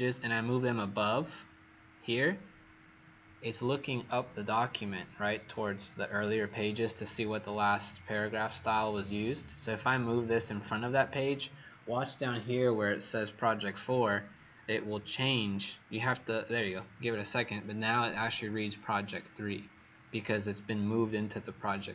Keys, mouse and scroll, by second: 9.6 click.